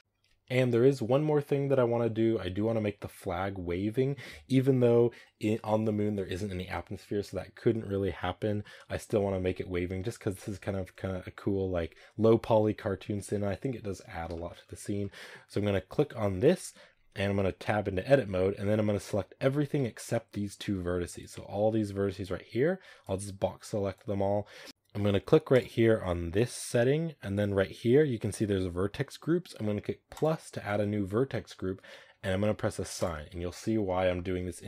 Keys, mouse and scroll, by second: 0.0-13.1 drag, 13.1-14.2 scroll up 1, 14.2 shift+middle drag, 14.5-14.9 scroll up 4, 14.9-15.8 shift+middle drag, 15.8 right click, 17.5 Tab, 19.6 a, 22.2 b, 23.8 b, 30.1-34.6 drag.